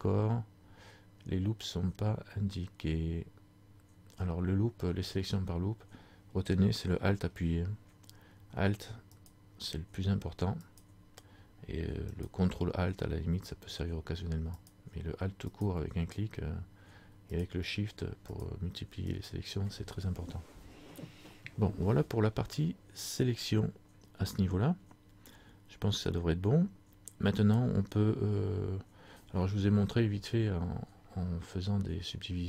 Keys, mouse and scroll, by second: 9.3 alt+right click, 12.2 alt+right click, 14.0 ctrl+alt+right click, 14.7 alt+right click, 17.5 alt+shift+right click, 18.4 alt+shift+right click.